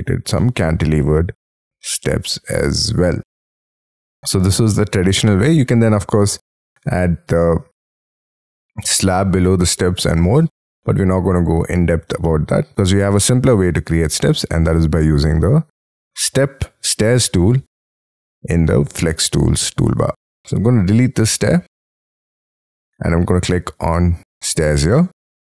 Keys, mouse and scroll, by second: 0.3 middle click, 4.7 middle click, 5.7 scroll down 1, 5.8-6.4 scroll up 8, 10.7 middle click, 11.5-12.0 scroll down 6, 12.2 middle click, 12.8 scroll down 3, 13.2 middle click, 21.6 Delete, 24.9 middle click.